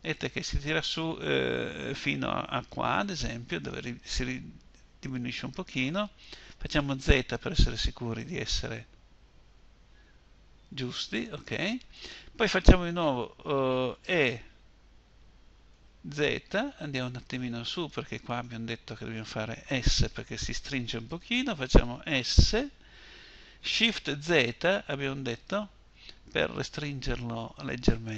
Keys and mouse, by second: 10.3-12.7 middle drag, 13.3 e, 17.7-21.7 drag, 21.7 s, 27.3-28.1 drag.